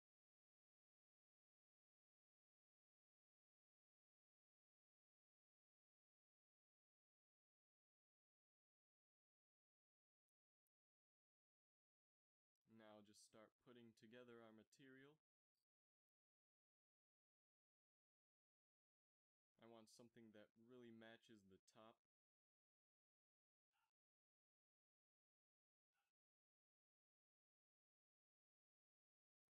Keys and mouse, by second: 18.5 shift+z, 23.3 click, 28.9 click.